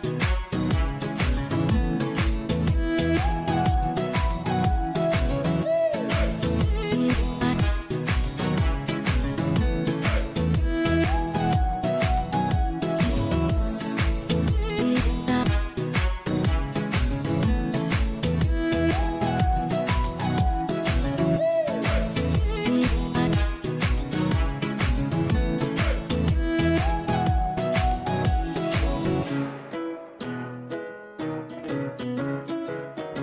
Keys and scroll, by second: 28.5 Delete, 32.9 ctrl+z.